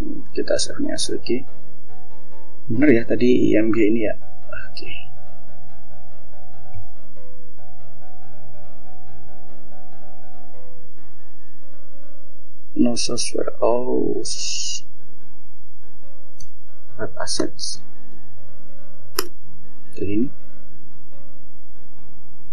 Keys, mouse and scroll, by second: 0.0 click, 2.6-4.2 drag, 5.9 click, 12.5 click, 14.1 click, 16.6 BackSpace, 18.4 BackSpace, 20.1 click.